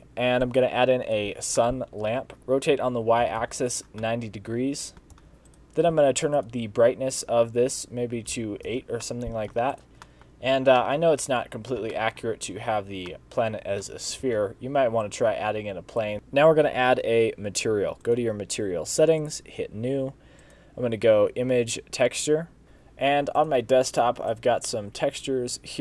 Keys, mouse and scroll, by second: 1.6 middle click, 2.4 ctrl+z, 2.4 r, 4.0 middle click, 5.2 g, 6.4 click, 7.2 click, 9.1 middle click, 9.8 click, 10.1 shift+middle click, 10.4-10.8 scroll up 3, 10.8 middle click, 11.8 scroll down 1, 12.0 shift+middle click, 12.6-13.2 scroll up 2, 13.2 middle click, 13.7 scroll down 3, 14.0 shift+a, 15.0 s.